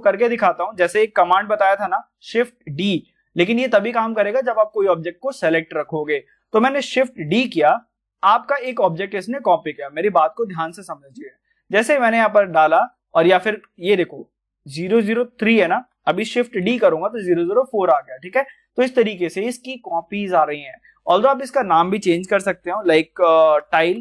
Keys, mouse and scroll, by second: 3.0 shift+d, 4.2 click, 7.2 shift+d, 11.7 click, 15.8 click, 16.4 shift+d, 18.1 click, 20.9 click, 21.0 click, 23.1-24.0 typing.